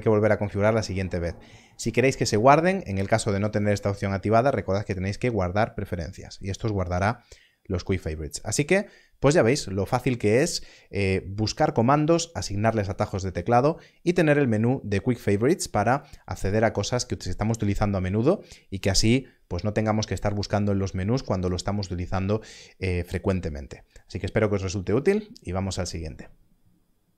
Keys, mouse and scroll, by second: 3.5 click, 6.9 click.